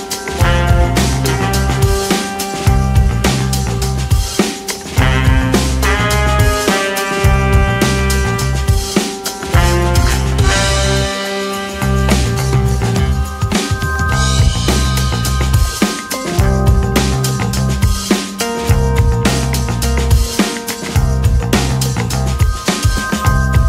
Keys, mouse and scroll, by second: 2.8 click, 4.1 click, 7.9-11.2 drag, 13.2-14.3 scroll up 2, 14.3 click, 16.7 ctrl+z, 17.8 ctrl+z, 19.3 click, 21.4 click.